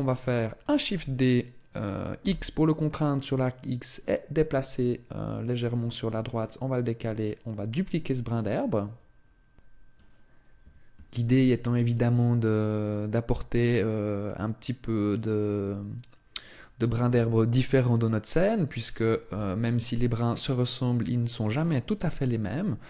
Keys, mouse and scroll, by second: 0.8 shift+d, 7.2 click, 19.1 Tab, 21.8 a.